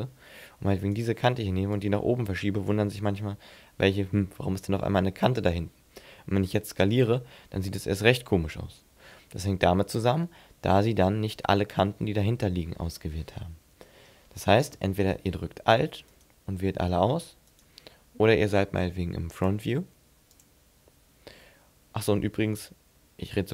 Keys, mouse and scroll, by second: 0.8 right click, 1.7 click, 6.7 s, 9.6 right click, 10.1 middle click, 13.6 ctrl+z, 16.1 alt+right click, 17.5 right click, 20.4 click.